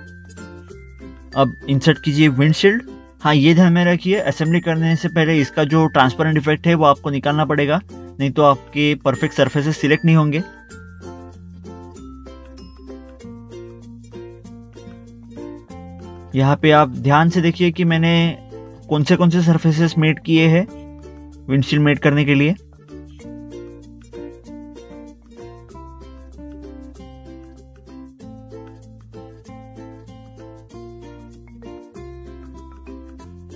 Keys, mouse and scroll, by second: 0.8 click, 1.0 double click, 1.7 click, 2.8 scroll down 1, 3.8 middle click, 4.5 click, 6.7 click, 12.4 click, 15.8 click, 15.9 right click, 16.5 middle click, 17.9 middle click, 18.2 scroll down 1, 18.7 middle click, 19.1 scroll down 1, 20.9 scroll down 1, 21.0 click, 23.1 scroll up 1, 23.3 scroll down 1, 24.5 click, 26.1 right click, 28.0 scroll up 1, 28.7 click, 29.4 scroll up 1, 30.5 scroll down 1, 31.7 click, 32.5 right click, 32.8 scroll down 1.